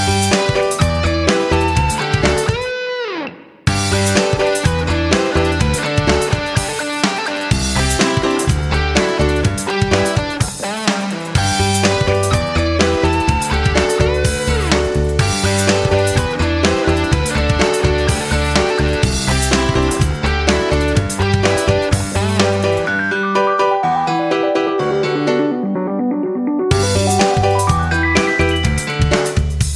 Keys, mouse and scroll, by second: 7.0 Down, 7.2 Down, 7.7 Right, 8.3 Down, 8.3 Right, 12.5-14.5 drag, 15.9 Up, 16.5 Right, 18.1-29.7 drag.